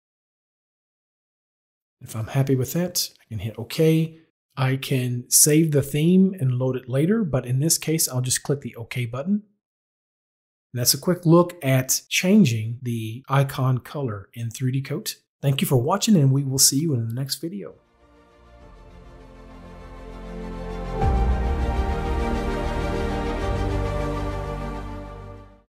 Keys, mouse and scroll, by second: 3.1 click, 10.1 click.